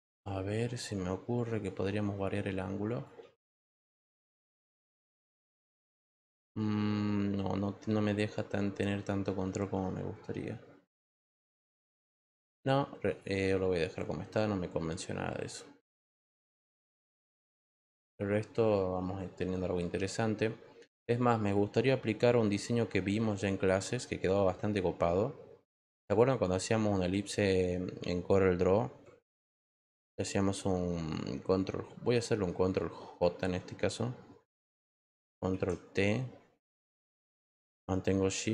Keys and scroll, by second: 33.1 ctrl+j, 35.5 ctrl+t.